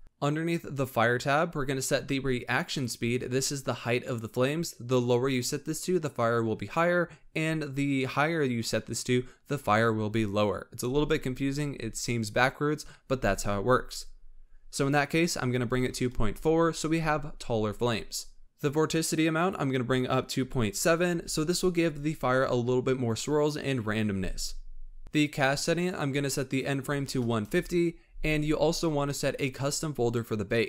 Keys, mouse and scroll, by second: 0.6-2.0 drag, 2.0 scroll down 1, 2.6-5.8 drag, 19.3-22.3 drag, 25.0 scroll down 9, 25.7-28.8 drag.